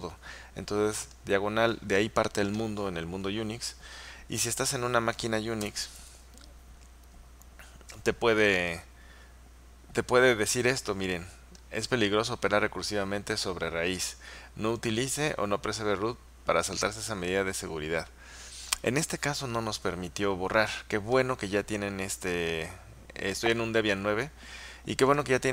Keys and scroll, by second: 5.7 Return.